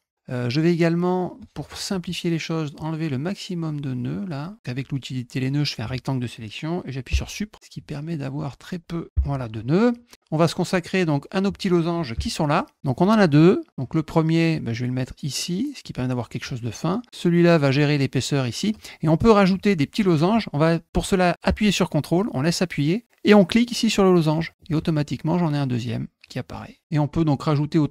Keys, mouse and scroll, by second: 1.3 click, 7.7 click, 11.2 middle click, 12.6 middle click, 13.7-15.8 drag, 17.1 click, 24.3 ctrl+click, 25.0-26.8 drag.